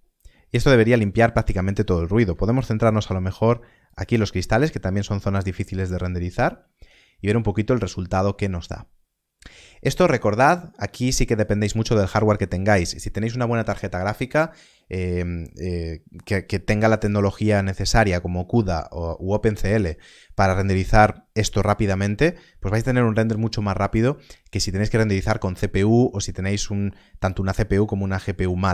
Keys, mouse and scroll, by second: 3.0 ctrl+b.